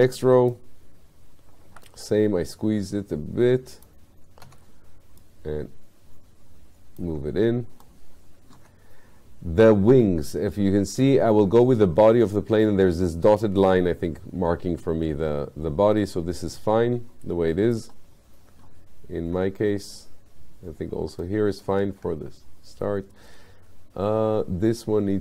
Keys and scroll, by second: 1.7 r, 4.5 w.